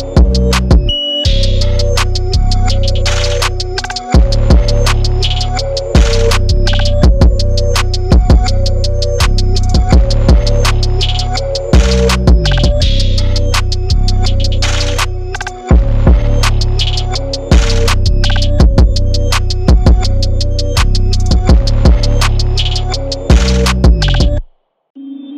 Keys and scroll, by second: 1.0 Return, 1.6 super+=, 1.8 p, 5.0 super+z, 5.1 super+z, 5.4 super+0, 6.1 Return, 6.5 super+i, 6.6 v, 6.6 super+=, 6.7 super+=, 7.1 super+t, 8.4 Return, 8.9 super+t, 9.5 super+t, 10.8 Return, 10.9 Left, 11.0 Left, 11.6 super+t, 15.4-17.4 typing, 15.5 super+=, 17.5 super+0, 17.7 super+=, 17.9 super+=, 18.7 super+t, 19.4 Return, 20.1 super+t, 20.5 Return, 21.1 super+t, 22.1 Return, 23.2 super+t, 23.6 Return, 25.0 super+t.